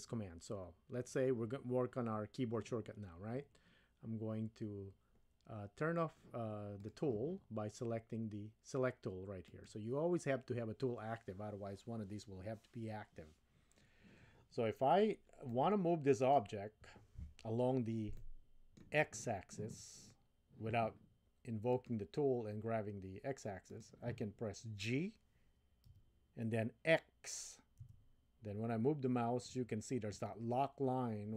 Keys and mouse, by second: 6.7 click, 9.5 click, 15.5-16.4 middle drag, 18.2-18.8 middle drag, 21.7 click, 23.8 click, 25.9 g.